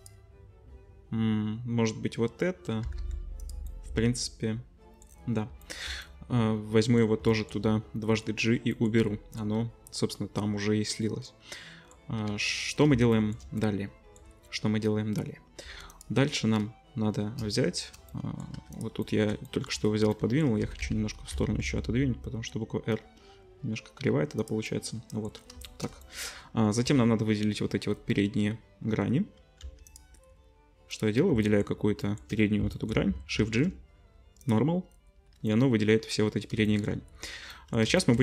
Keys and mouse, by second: 2.8-5.5 middle drag, 2.8 g, 5.5 shift+click, 5.8-7.2 middle drag, 7.2 shift+click, 7.5 middle click, 8.4 right click, 8.5-11.7 middle drag, 11.7 click, 12.0 middle click, 12.1 ctrl+click, 12.3 ctrl+s, 12.7-15.9 shift+middle drag, 15.6 2, 15.9 click, 16.0-18.7 middle drag, 18.5 2, 18.7 click, 18.8 middle click, 19.2 click, 19.2 middle click, 19.3 shift+click, 19.5 shift+middle click, 19.9 middle click, 20.6 g, 24.7 middle click, 25.4-30.9 shift+middle drag, 26.8 3, 29.6 3, 30.9 click, 31.0-37.9 middle drag, 33.4 shift+g, 37.9 shift+click, 38.0-38.2 shift+middle drag.